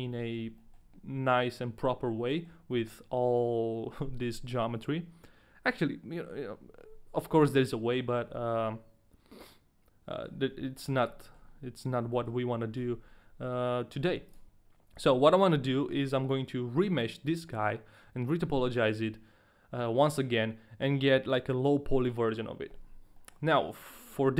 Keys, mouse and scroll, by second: 0.0 shift+middle click, 0.0 scroll up 2, 0.1 middle click, 0.8 shift+middle click, 1.2 middle click, 2.9 shift+middle click, 3.0 scroll up 2, 7.6 middle click, 8.4 middle click, 8.6 middle click, 10.3 scroll down 1, 10.8 shift+middle click, 10.8 scroll down 1, 10.9 middle click, 11.4 shift+middle click, 11.4-12.0 scroll down 3, 12.3 shift+middle click, 12.3-13.6 scroll down 1, 13.6 Tab, 14.2 Tab, 14.2 ctrl+a, 14.2 shift+middle click, 23.4 shift+middle click.